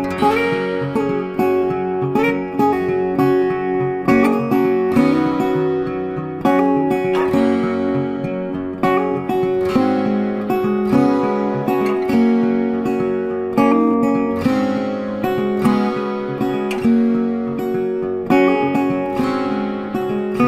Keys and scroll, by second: 4.5 ctrl+t.